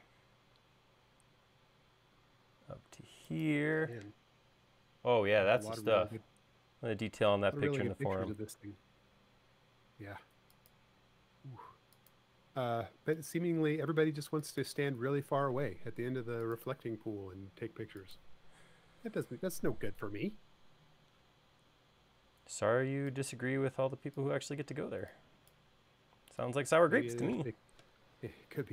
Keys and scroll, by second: 24.2 e.